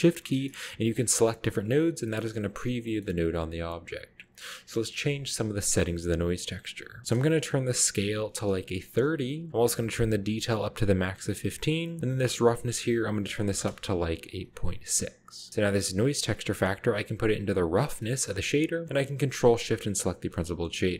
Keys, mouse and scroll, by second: 0.9 ctrl+shift+click, 2.3-2.7 middle drag, 3.1 middle click, 3.1-4.2 scroll up 2, 4.3 scroll down 1, 4.8 middle click, 4.9 scroll up 1, 5.8-6.9 scroll up 2, 7.0 click, 8.0 typing, 8.9 Return, 10.2 click, 12.0-13.5 drag, 13.5 typing, 13.6 Return, 14.9-15.5 scroll down 1, 14.9-15.5 middle drag, 16.3-18.2 drag, 18.0-18.8 scroll down 2, 18.2-18.6 middle drag, 20.1 ctrl+shift+click.